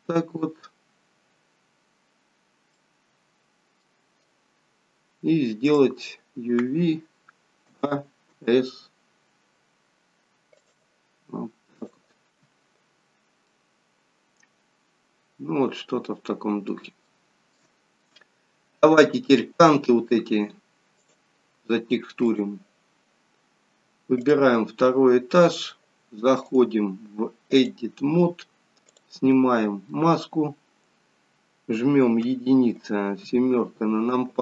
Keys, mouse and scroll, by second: 1.4-2.3 scroll up 3, 2.3-2.8 scroll down 2, 2.8 middle click, 12.1 click, 12.9-13.5 scroll down 1, 13.5 middle click, 17.0 shift+scroll down 1, 17.1 shift+middle click, 17.7 middle click, 17.7 scroll down 2, 20.9 click, 23.4 scroll up 1, 24.3 click, 24.9 middle click, 26.5 click, 29.3 click, 29.3 middle click, 32.2 KP_1, 33.2 KP_3.